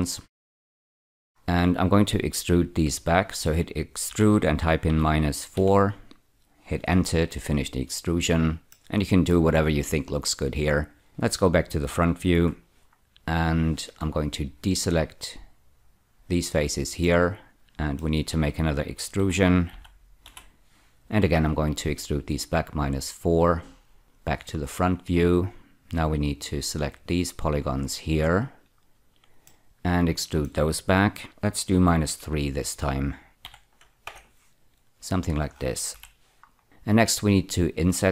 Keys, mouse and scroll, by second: 0.4 middle click, 1.3-3.2 scroll up 2, 4.1-5.5 typing, 6.9 Return, 8.7 middle click, 12.3 F4, 12.9-14.0 scroll up 1, 14.8 click, 17.0 middle click, 19.1-20.2 typing, 21.3 Return, 24.0 F4, 24.5-25.9 scroll up 1, 25.9 click, 27.7 shift+click, 29.4 middle click, 31.2-32.0 typing, 33.4 -, 34.0 Return, 35.9 F4, 36.5-37.3 scroll up 1.